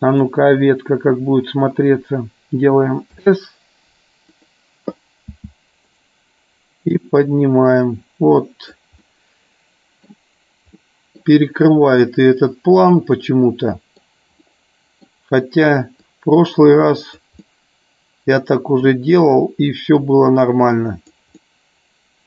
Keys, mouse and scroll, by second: 4.3 click, 7.1 scroll up 1, 7.2-8.7 drag, 9.1-10.2 middle drag, 10.7 scroll up 1, 10.9 middle click, 12.8-14.1 middle drag, 14.5-15.1 middle drag, 16.1-17.2 drag, 17.5-18.9 middle drag, 20.1-21.2 drag, 21.4-22.2 middle drag.